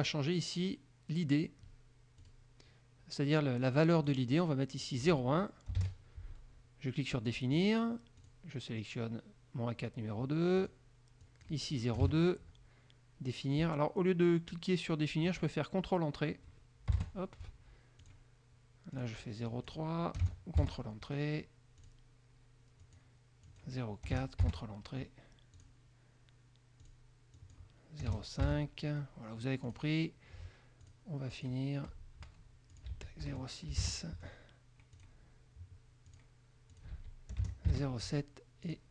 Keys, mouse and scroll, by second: 2.4 click, 4.2 click, 5.0 click, 5.9 KP_0, 7.4 click, 8.4 click, 10.8 click, 11.4 click, 12.2 KP_0, 17.1 ctrl+Return, 18.2 click, 19.1 click, 19.6 click, 20.3 KP_0, 20.7 ctrl+KP_3, 22.0 click, 23.0 click, 23.6 click, 24.2 KP_0, 24.6 ctrl+Return, 25.7 click, 27.0 click, 27.5 click, 28.2 KP_0, 28.6 ctrl+Return, 29.8 click, 31.0 click, 31.4 click, 32.8 ctrl+click, 33.0 ctrl+a, 33.4 ctrl+KP_0, 33.6 ctrl+KP_6, 34.0 ctrl+Return, 35.2 click, 36.3 click, 36.9 ctrl+click, 37.0 ctrl+a, 37.5 ctrl+KP_0, 37.9 ctrl+Return, 38.8 click.